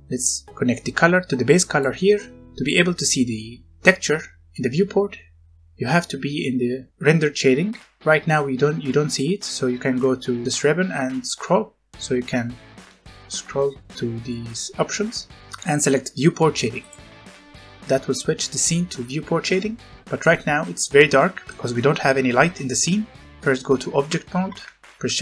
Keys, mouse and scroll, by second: 2.2 scroll down 1, 11.3-12.0 scroll down 1, 12.0-12.4 scroll up 1, 12.4 scroll down 1, 12.7-13.1 scroll up 1, 13.1-15.4 scroll down 1, 16.8 click, 18.5-19.5 scroll up 1, 19.5 middle click, 21.4 shift+middle click, 23.3 Escape, 24.0 Tab, 25.0 shift+a.